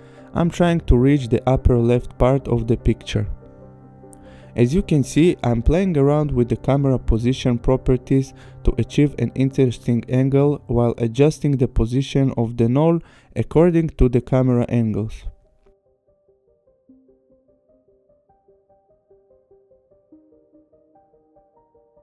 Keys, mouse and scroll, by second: 0.9 shift+click, 2.4 click, 5.3 click, 9.9-11.1 scroll, 13.1 click, 17.8 click, 20.4 click.